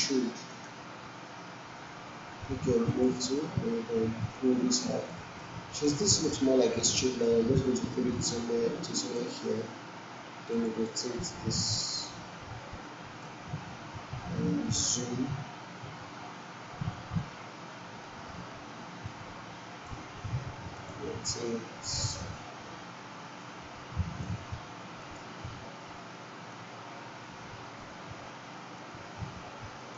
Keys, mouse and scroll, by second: 0.4 alt+click, 2.8 alt+click, 5.3-6.0 alt+right click, 6.0 alt+middle click, 7.2-9.4 drag, 18.0-19.9 drag.